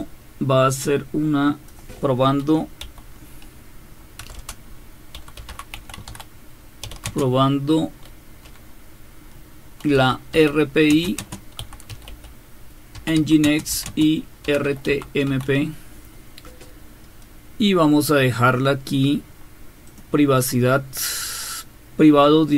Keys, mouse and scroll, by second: 0.0-1.7 drag, 4.2-7.4 typing, 9.7-15.8 typing, 18.7-19.9 scroll down 1, 19.9 click.